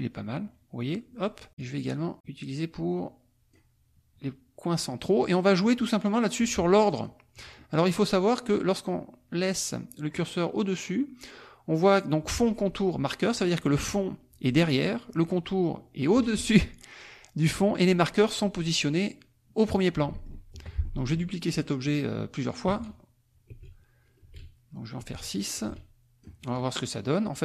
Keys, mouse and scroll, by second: 1.6-3.7 drag, 4.7 click, 6.9 click, 7.6 click, 19.9 click, 20.5 F1, 20.8 click, 22.7-26.7 drag, 22.7 space, 23.5 space, 24.2 space, 25.0 space.